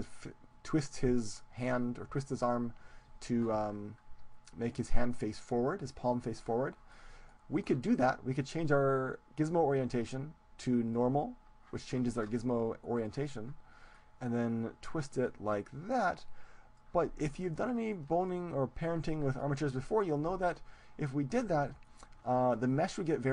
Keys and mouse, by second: 6.6-8.4 middle drag, 8.4-10.2 drag, 13.0-14.8 drag, 14.8 middle click, 15.2-17.1 drag, 17.1-21.1 middle drag, 22.0-23.3 middle drag.